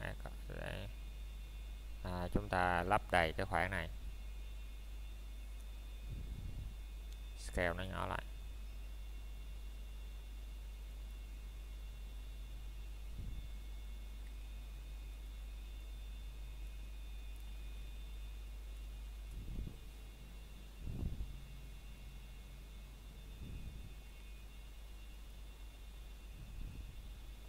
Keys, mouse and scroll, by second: 13.3 KP_Enter, 16.0 middle click, 16.7 scroll up 1, 17.7 middle click, 18.3 typing, 18.4 shift+middle click, 20.0 scroll down 1, 20.4 middle click, 20.9 scroll up 1, 21.5 middle click, 23.9 Tab, 26.3 click.